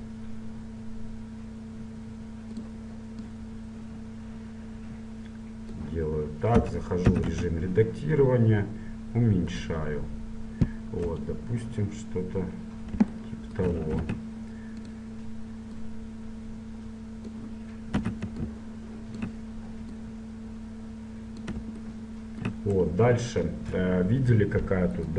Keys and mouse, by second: 0.2 s, 3.4-5.3 drag, 6.8 Tab, 7.2 s, 11.2 KP_1, 14.1 ctrl+Tab, 16.0-17.8 drag, 18.1 a, 18.5-21.9 drag.